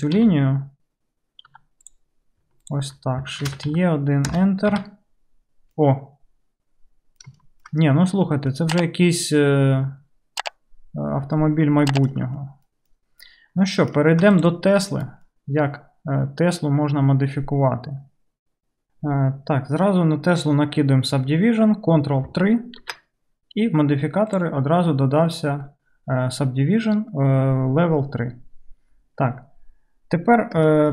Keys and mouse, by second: 0.2 j, 1.6-4.7 drag, 1.6 2, 2.7 ctrl+middle click, 2.7 ctrl+right click, 3.5 shift+e, 4.7-6.7 right drag, 4.8 Tab, 7.2 right click, 7.8-12.3 right drag, 14.3-30.9 right drag, 14.4 click, 14.9 KP_Decimal, 22.8 ctrl+3.